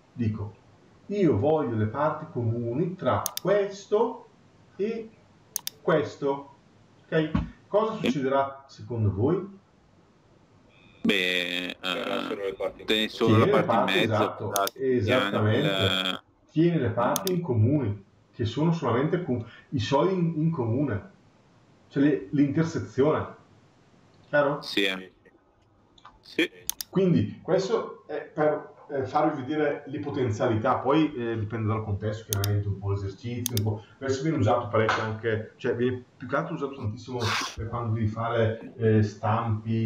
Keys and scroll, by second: 37.3 Delete.